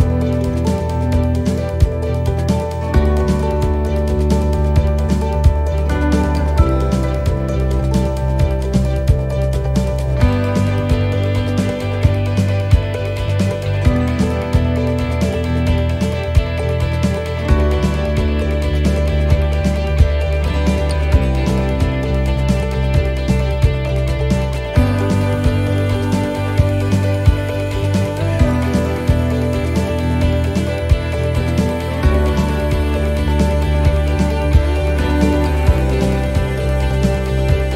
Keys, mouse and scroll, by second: 1.7 middle click, 2.2 scroll down 1, 3.4 click, 10.6 middle click, 15.7 click, 16.7 middle click, 19.6 click, 21.8 middle click, 23.4 click, 26.4 middle click, 28.9 shift+d, 30.1 r, 33.3 click, 35.4 middle click.